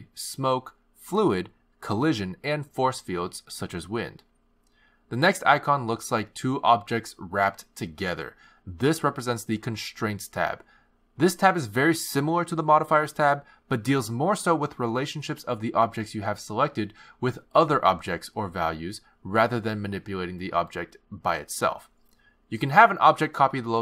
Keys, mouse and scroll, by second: 6.7 click, 9.6 click, 12.1 click, 14.2 click, 17.0 click, 19.0 click, 23.2 click, 23.7 click.